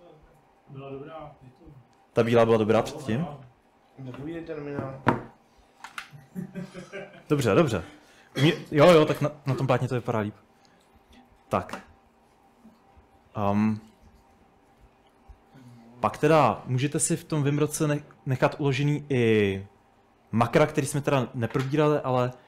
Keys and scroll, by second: 12.2 typing, 13.7 k, 13.9 k, 14.2 k, 15.4-17.7 typing.